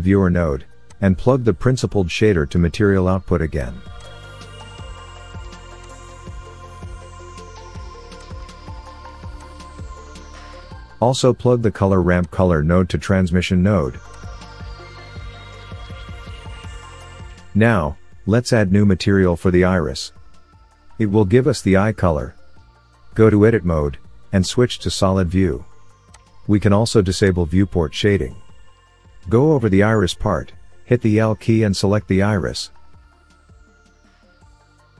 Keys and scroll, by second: 1.6 Delete, 23.0 Tab, 32.2 l.